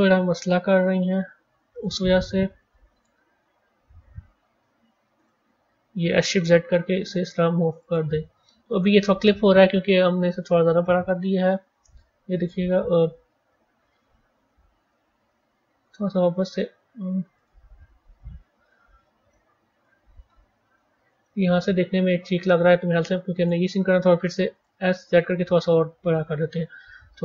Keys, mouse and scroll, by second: 8.8-11.0 middle drag, 11.0-11.4 scroll down 3, 11.4-12.1 middle drag, 12.1 scroll up 2, 13.7 s, 17.3-18.4 right drag, 18.4 ctrl+z, 19.2-20.1 middle drag, 20.1-20.7 scroll up 4, 20.7-21.2 scroll up 2, 21.2-24.2 middle drag, 26.8-27.2 middle drag.